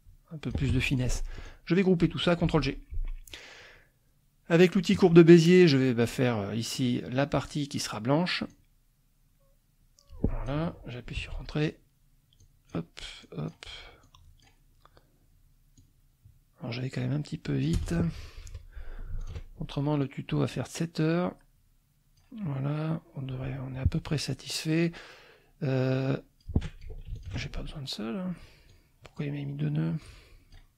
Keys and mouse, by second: 0.7 ctrl+F1, 0.9 ctrl+click, 2.4 ctrl+g, 4.9 click, 6.0 click, 8.5-10.6 drag, 11.1 Return, 12.4 click, 13.2 click, 14.0 click, 15.8-17.8 drag, 17.7 Return, 18.4 F2, 19.2 ctrl+alt+click, 20.0 click, 21.0-22.3 drag, 24.3-26.6 drag, 27.1 ctrl+alt+click, 28.7 click, 30.0 click.